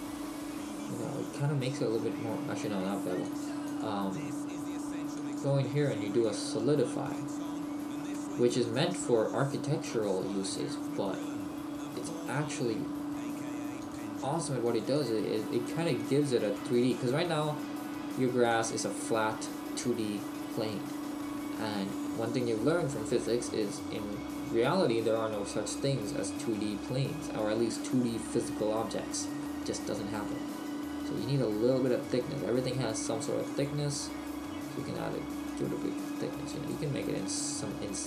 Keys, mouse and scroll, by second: 3.2 click, 8.1 middle click, 10.4-10.7 scroll up 2, 11.2 middle click, 11.2-12.4 scroll up 3, 13.8-19.2 click, 19.2 middle click, 21.3 scroll up 1, 22.1 middle click, 24.0 middle click, 29.5 middle click, 33.5 click, 35.5 click.